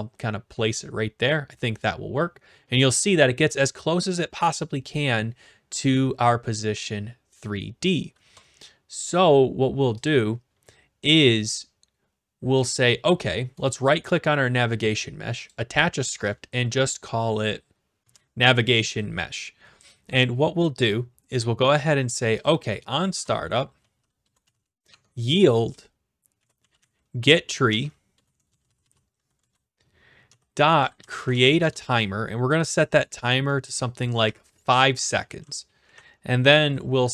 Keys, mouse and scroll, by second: 10.1 click, 11.8-12.8 scroll up 2, 13.7-14.7 right drag, 15.5-16.5 drag, 18.0 Return, 18.9-19.6 typing, 22.4-23.5 drag, 23.1 Return, 23.5-24.9 typing, 26.6-31.8 typing, 29.4 Return, 34.2 5, 35.8 Right.